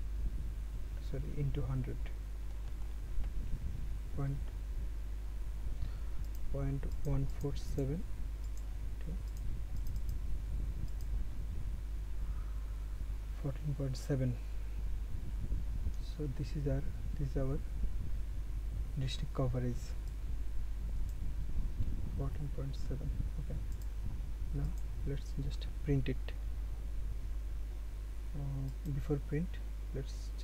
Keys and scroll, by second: 3.3 ctrl+z.